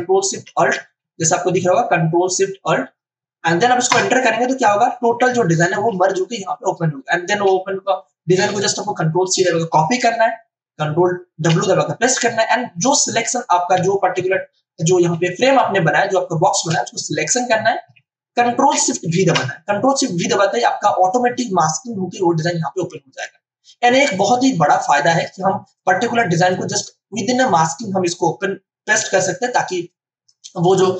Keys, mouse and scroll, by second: 3.9 ctrl+alt+shift+Return, 8.6 ctrl+a, 11.3 ctrl+w, 15.0 space, 15.5 ctrl+alt+click, 19.0 ctrl+alt+shift+v, 25.4 space, 25.7 click, 25.9 space, 29.7 space, 29.8 click, 30.2 space.